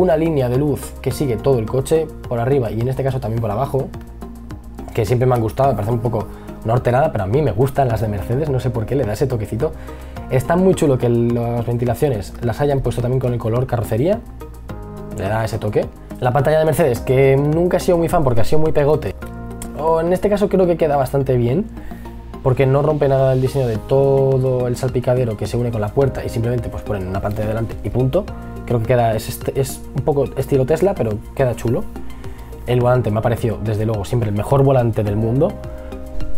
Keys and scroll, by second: 4.7 e, 6.8 b, 30.5 e, 32.2 b.